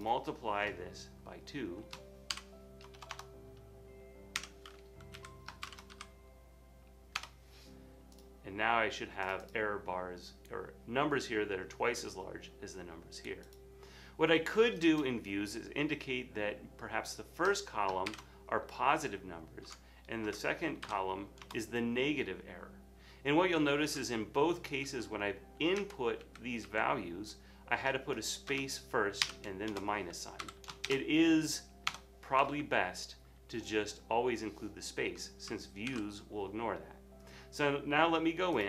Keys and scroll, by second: 2.6-3.0 typing, 4.4 =, 5.2 Left, 5.7 shift+8, 5.9 2, 7.2 Return, 10.3 typing, 18.1 typing, 19.7 Tab, 20.6-21.4 typing, 25.0 Left, 25.8 Right, 26.2 Left, 26.7 Right, 29.3-30.6 typing, 29.7 Return, 30.4 Up, 31.9 Return, 32.6 typing, 34.9 typing, 36.0 super+s.